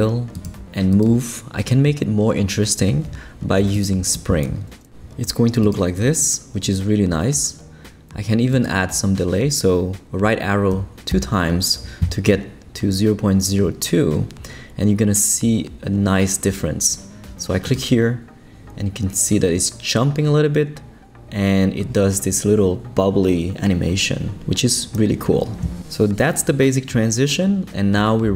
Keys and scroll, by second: 10.7 Right.